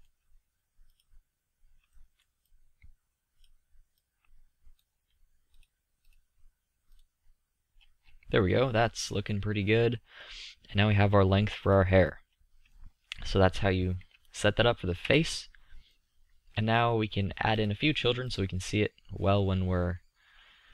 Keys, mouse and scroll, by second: 1.5 click, 2.2 middle click, 2.3 click, 9.6 middle click, 11.5 click, 15.3 KP_5, 20.3-20.7 middle drag.